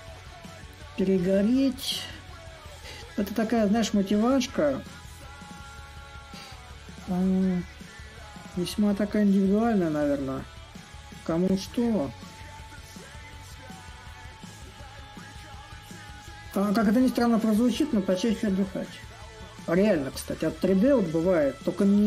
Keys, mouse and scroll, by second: 0.0-5.0 drag, 6.6-9.3 drag, 10.5-15.6 shift+drag, 16.0-21.0 drag.